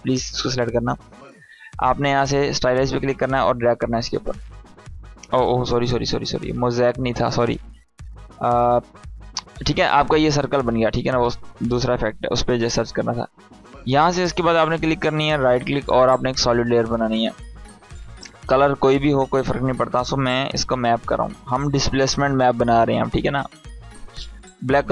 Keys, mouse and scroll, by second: 2.5-3.5 drag, 5.5 ctrl+z, 6.3 click, 7.0 right click, 7.8 click, 8.6 right click, 9.8-10.7 drag, 11.3 right click, 13.0 click, 15.7 click, 19.1-21.4 typing, 23.0 Return.